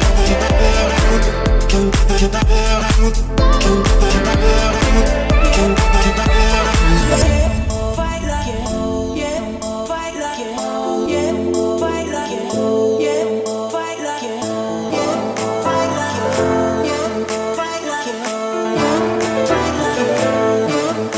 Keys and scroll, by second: 2.5 Escape, 6.3 Escape, 15.0 Escape, 15.6 o, 17.8 Escape.